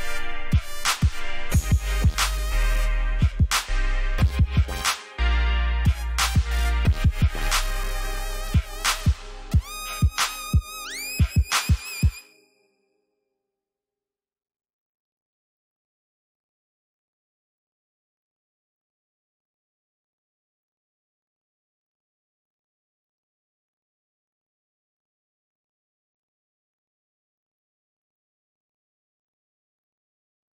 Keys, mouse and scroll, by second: 10.9 alt+scroll up 1, 12.1-12.9 alt+scroll down 2, 13.5 alt+scroll down 1, 15.4 click, 16.3-18.7 typing, 19.7 alt+scroll down 1, 20.2 alt+scroll up 1, 20.7 alt+scroll up 1, 22.2 alt+scroll up 1, 23.2 click, 23.2-23.8 scroll down 1, 24.0 ctrl+shift+s, 25.5 click.